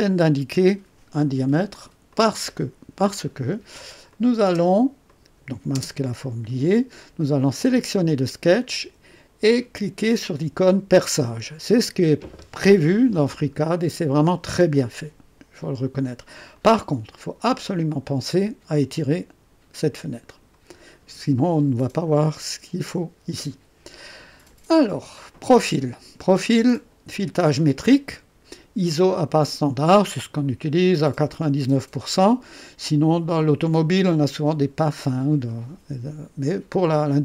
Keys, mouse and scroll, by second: 2.0 click, 4.0 click, 4.4 space, 5.0 click, 5.7 space, 7.3 click, 10.9 click, 12.8 scroll up 2, 13.5 scroll up 2, 14.1 right click, 16.5-20.6 drag, 26.2 click.